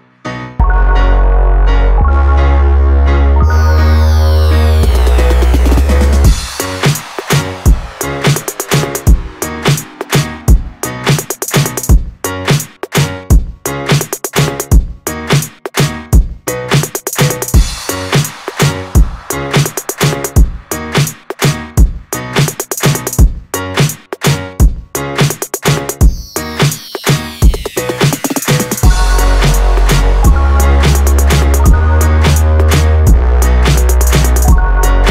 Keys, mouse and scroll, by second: 0.3 click, 1.2 Tab, 2.6 click, 3.4 click, 4.0-5.1 scroll down 4, 5.3 click, 5.8-6.5 scroll down 1, 6.5-8.6 drag, 8.6 Tab, 9.9 click, 11.1-13.0 drag, 13.0 scroll up 3, 14.0 click, 15.4 Tab, 16.0 click, 17.1 KP_7, 18.2 a, 19.9 u, 23.0 click, 24.1 click, 25.6-28.4 drag, 32.4 click, 34.2-35.1 drag.